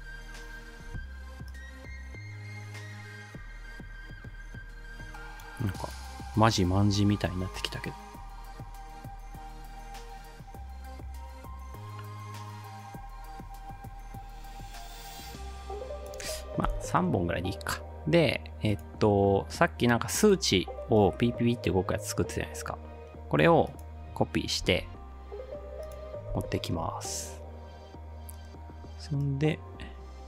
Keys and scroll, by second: 6.7 ctrl+d, 16.7 Delete, 24.6 ctrl+c, 26.4 ctrl+v.